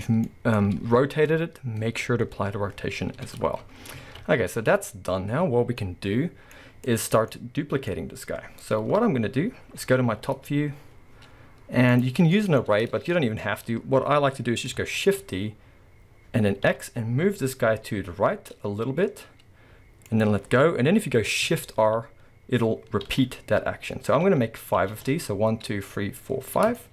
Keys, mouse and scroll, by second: 3.7-4.0 scroll down 1, 4.0 alt+a, 4.2-6.9 middle drag, 6.9 click, 7.3-8.9 middle drag, 8.9 KP_7, 9.7-10.1 scroll up 2, 10.1 z, 12.0 click, 12.3-12.6 shift+middle drag, 12.6-13.4 scroll up 2, 13.4-20.2 middle drag, 15.0 shift+d, 26.7-26.9 middle drag.